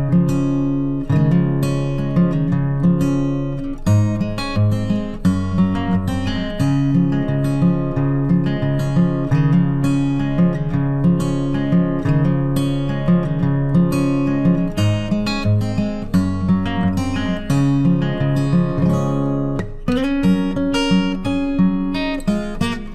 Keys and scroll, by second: 18.5 ctrl+t.